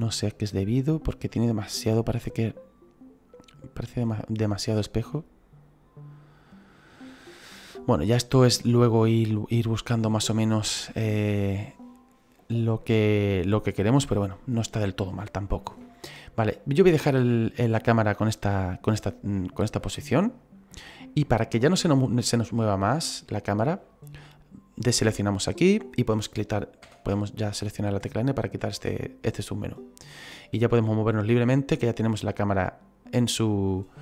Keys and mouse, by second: 1.1 click, 9.1 click, 11.0 click, 25.4 click, 26.8 n.